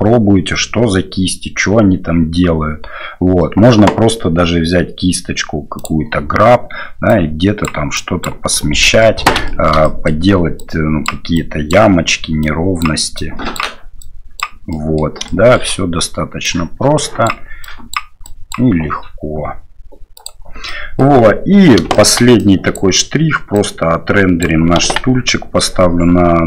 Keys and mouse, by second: 20.3 click, 20.7 middle click, 21.9 shift+middle click, 22.4 click, 23.5 click, 24.8 KP_1.